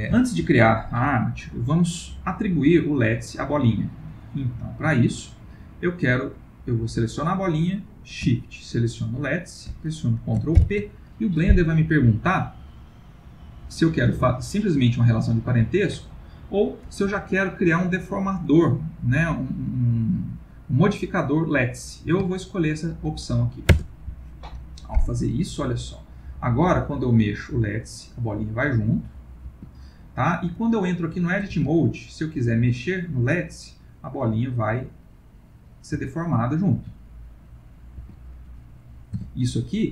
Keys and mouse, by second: 0.2 shift+middle click, 2.5 click, 7.0 click, 9.1 shift+click, 10.5 ctrl+p, 16.0 Down, 26.0 click, 26.7 g, 30.7 middle click, 31.6 Tab, 32.2 click, 32.5 g, 36.6 click, 36.8 g, 38.5-39.2 middle click, 38.7 middle click, 39.2 Tab.